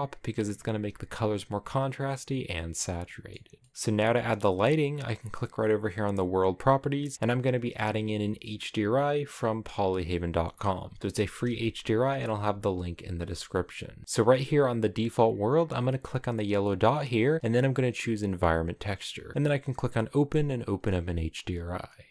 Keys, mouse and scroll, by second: 3.0-18.3 shift+middle drag, 18.3-22.1 drag.